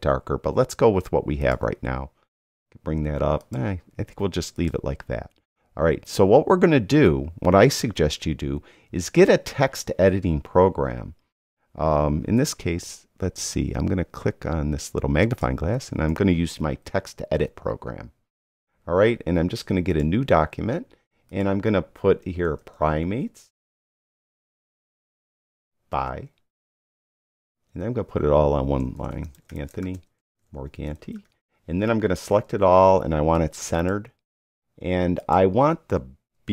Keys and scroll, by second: 16.1-17.3 typing, 17.3 Return, 22.3-24.8 typing, 25.2 Return, 25.9 b, 27.1-31.7 typing, 32.5 super+a.